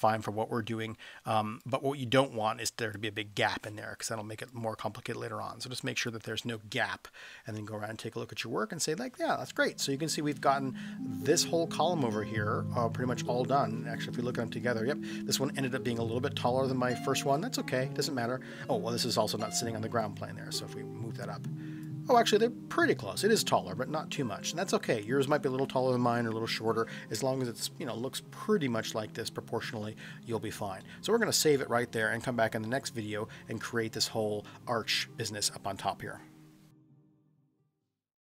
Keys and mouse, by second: 1.6-3.0 drag, 4.5-6.0 drag, 6.5-8.6 middle drag, 9.3-9.9 middle drag, 13.3-13.6 middle drag, 14.1 KP_1, 20.0-21.8 drag, 30.8-31.6 middle drag.